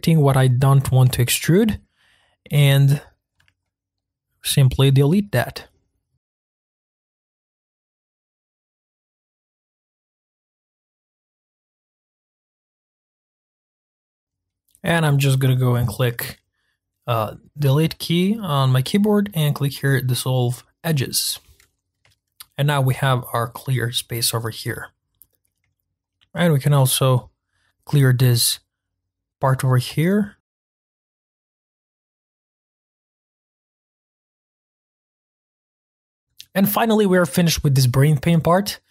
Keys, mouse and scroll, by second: 0.1 click, 0.9 click, 1.6 shift+click, 2.5 shift+click, 3.6-5.8 middle drag, 5.8 shift+click, 6.2 shift+click, 6.4 shift+middle click, 6.5 shift+click, 6.6 shift+click, 6.7-9.3 typing, 7.5 shift+middle click, 8.5 shift+middle click, 9.1 middle click, 10.0 middle click, 10.2 scroll down 1, 10.3 scroll up 1, 10.3 c, 11.0 middle click, 11.1 c, 11.3 middle click, 12.0 middle click, 12.2 scroll up 3, 12.2 middle click, 12.7 Delete, 12.9 ctrl+z, 13.1 c, 13.5 click, 13.6 ctrl+z, 13.8 shift+click, 14.0 shift+click, 14.4-20.9 middle drag, 21.7-22.1 scroll down 1, 22.1-24.6 shift+middle drag, 24.6-25.4 scroll up 3, 25.4 middle click, 25.9 Delete, 29.9 shift+middle click, 30.4-30.8 scroll up 3, 30.4 shift+middle click, 30.6 shift+click, 30.6 shift+click, 30.8 ctrl+z, 30.9 shift+click, 30.9 shift+middle click, 31.1 shift+click, 31.2 shift+middle click, 31.3 shift+click, 31.5 shift+click, 31.6 shift+middle click, 31.8 shift+click, 31.9 shift+click, 31.9 ctrl+click, 32.2 shift+click, 32.4 shift+click, 32.5 ctrl+click, 32.5 shift+middle click, 32.7 shift+click, 32.9 shift+click, 32.9 shift+click, 33.0 shift+middle click, 33.2 ctrl+click, 33.3 shift+click, 33.4 ctrl+click, 33.5 shift+middle click, 33.8 ctrl+click, 33.8 ctrl+z, 33.9 ctrl+click, 34.0 shift+right click, 34.1 ctrl+z, 34.2 shift+s, 34.4 shift+click, 34.4 ctrl+z, 34.5 shift+click, 34.6 shift+middle click, 34.7 shift+click, 34.8 shift+click, 35.3 shift+middle click, 35.4-35.8 scroll down 4, 35.8 shift+click, 35.9 shift+middle click, 36.0 Delete.